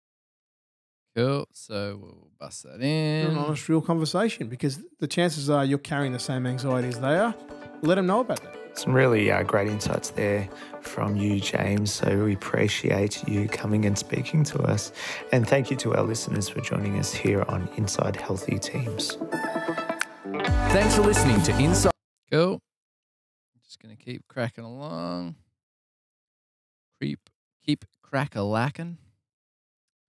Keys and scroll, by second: 11.0 F8, 17.5 BackSpace, 19.4 BackSpace, 20.8 super+[, 21.0 super+[, 23.5 Delete, 27.7 super+Tab, 27.9 super+Tab.